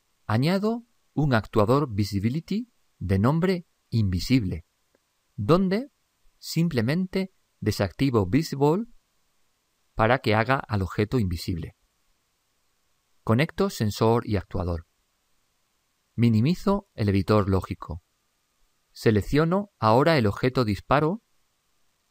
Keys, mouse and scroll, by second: 16.5 ctrl+Up, 19.6-21.4 drag, 21.9-22.1 drag.